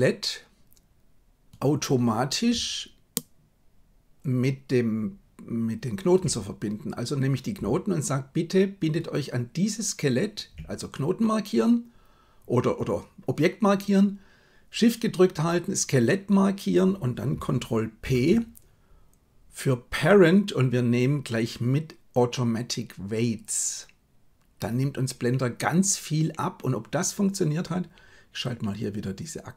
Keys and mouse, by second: 18.0 ctrl+p.